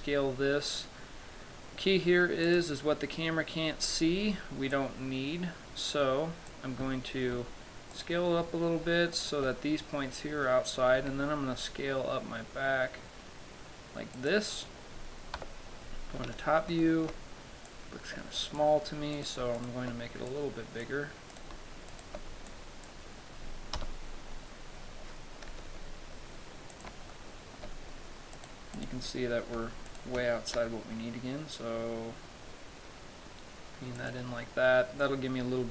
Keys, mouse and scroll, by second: 0.1 s, 2.9 click, 5.0 click, 7.6 Tab, 8.2 right click, 9.5 shift+right click, 11.2 s, 14.6 click, 15.7 KP_7, 16.4-17.3 scroll down 10, 17.1 shift+middle click, 18.0 click, 19.5 right click, 19.9 shift+right click, 20.6 click, 21.7 right click, 22.2 shift+right click, 22.8 click, 24.1 KP_0, 25.8 s, 27.1 click, 27.4 shift+middle click, 29.0 right click, 29.5-30.0 scroll down 1, 30.2 shift+right click, 30.8 s, 34.4 click.